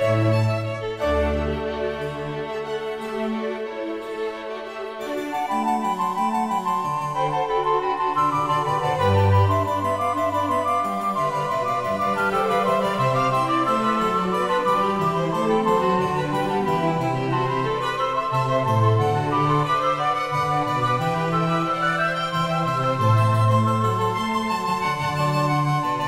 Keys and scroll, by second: 2.6 Tab, 9.4 Tab, 13.6 ctrl+alt+KP_0, 20.0 8.